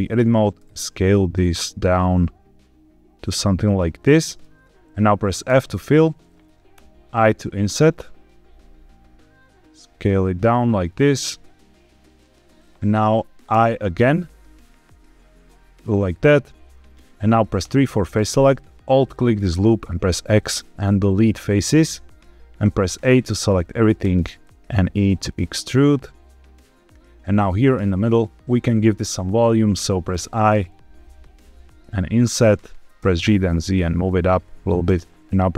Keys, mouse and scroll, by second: 0.5 s, 3.6 click, 3.9 middle click, 5.4 f, 6.7 i, 12.1 click, 13.4 i, 15.7 shift+click, 16.2-16.8 scroll up 1, 17.5 3, 18.8 alt+click, 19.7 x, 22.6 a, 23.0 middle click, 23.9 e, 26.4 click, 27.5 click, 30.0 i, 32.1 click, 32.9 g, 33.1 z, 34.8 shift+click.